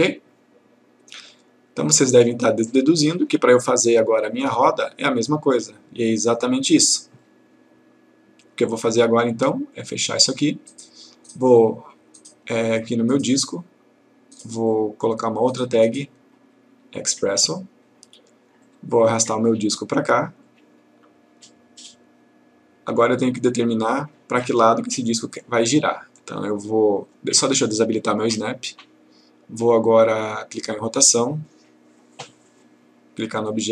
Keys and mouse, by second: 6.2 click, 10.1 click, 14.4 right click, 17.3 click, 23.2-24.5 click, 28.5 click, 30.6 click, 32.3 click.